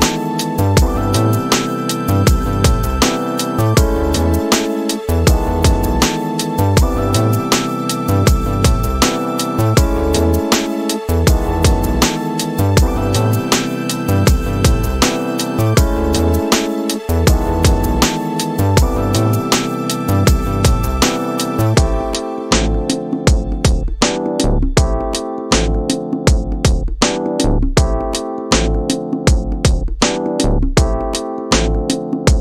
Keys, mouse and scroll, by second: 0.6 click, 2.1 click, 3.3-5.7 drag, 8.6 middle click, 10.3-17.9 drag, 20.1-21.8 drag, 25.4-27.6 drag, 30.4 middle click.